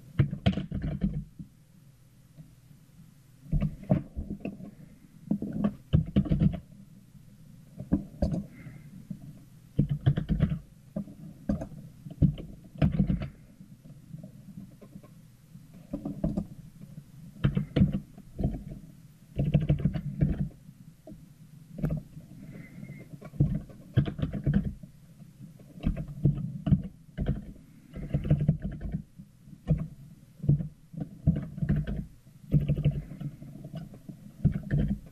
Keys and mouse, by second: 26.3 r.